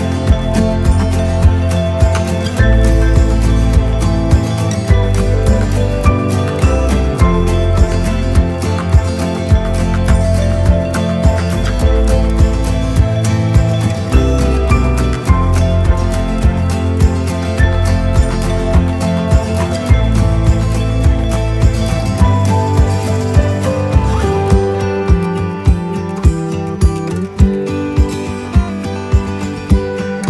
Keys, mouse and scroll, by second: 0.5 right click, 17.2 right click, 17.8 right click, 18.4 right click, 19.2 right click, 20.0-21.2 right drag, 26.2 click.